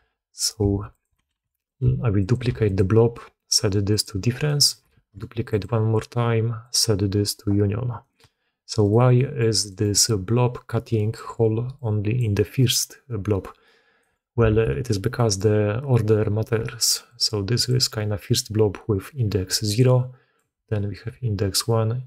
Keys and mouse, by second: 0.0-2.3 typing, 4.4 click, 4.8 shift+d, 6.5-8.1 drag, 8.7 click, 9.0 click, 9.6 click, 9.8 d, 9.9-11.1 drag, 11.1-12.4 d, 11.6 click, 12.5-13.9 drag, 13.9 d, 14.4 alt+a, 15.0 click, 16.5-17.7 typing, 17.0 click, 19.6 click, 20.3-21.4 d, 21.4-22.0 drag.